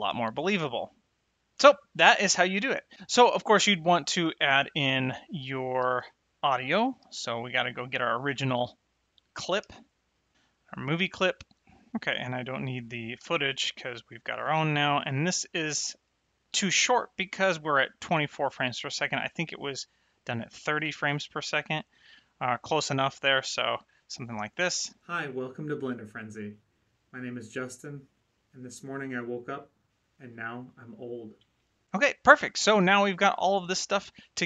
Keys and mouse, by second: 0.4 space, 4.7 click, 5.9 g, 6.2 click, 7.0 shift+Left, 9.6 shift+a, 10.4 click, 11.7 click, 12.0 click, 13.1 x, 13.4 click, 14.7 click, 18.7 click, 20.1 click, 24.2 space, 31.3 space.